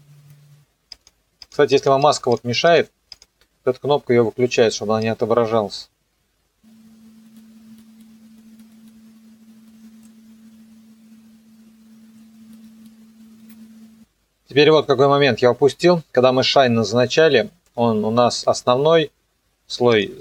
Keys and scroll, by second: 10.0 KP_0, 12.1 KP_0.